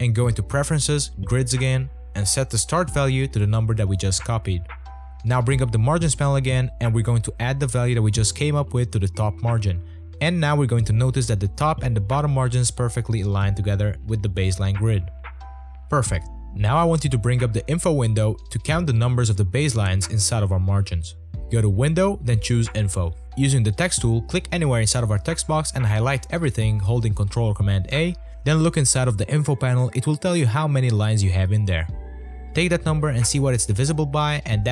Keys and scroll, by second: 4.7 v, 5.9 Return, 10.0 space, 10.6 space.